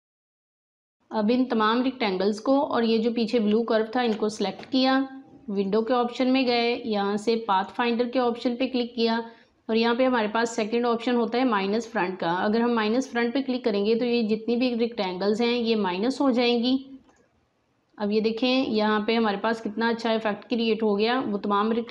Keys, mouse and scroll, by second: 0.0 alt+scroll down 1, 0.4-3.4 drag, 3.4 space, 3.5 click, 4.0 space, 5.5 click, 16.4 click.